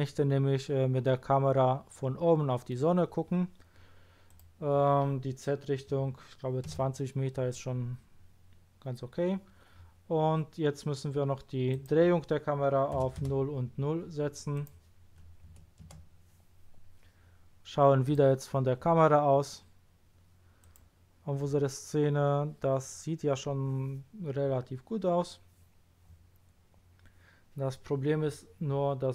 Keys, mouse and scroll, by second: 4.2 click, 5.9 KP_2, 6.1 KP_0, 6.7 Return, 7.8-8.6 scroll down 1, 8.6 scroll up 1, 11.7 click, 13.0 KP_0, 13.2 Return, 14.5 click, 15.5 KP_0, 15.8 Return, 18.0 click, 20.6 click, 24.6-25.6 middle drag, 24.6-25.6 scroll down 1.